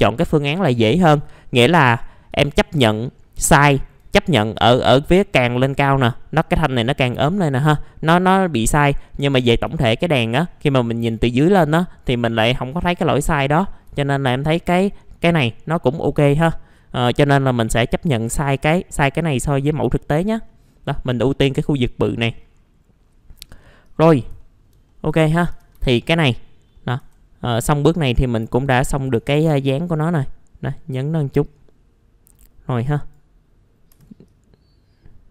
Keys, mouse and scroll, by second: 1.1-1.8 scroll up 1, 1.8 click, 2.4 alt+middle click, 3.3 scroll up 1, 3.7 alt+middle click, 4.5-5.5 scroll up 1, 7.3-8.2 scroll down 1, 9.4 middle click, 9.8 alt+middle click, 10.6 scroll down 1, 10.9 alt+middle click, 13.1-13.5 scroll down 1, 13.5 scroll up 1, 14.0 alt+middle click, 16.8 scroll down 1, 17.4-19.2 scroll up 1, 20.0 scroll down 1, 20.5 middle click, 22.1 scroll down 1, 23.0-23.5 scroll up 1, 23.8 click, 24.4 alt+middle click, 25.2 alt+middle click, 25.5 alt+f, 25.7 alt+z, 27.0 1, 27.4-28.7 drag, 29.1 w, 29.5-31.7 drag, 32.3 middle click, 32.3-32.8 scroll down 1, 32.8 click, 33.9 r, 34.3-35.3 drag.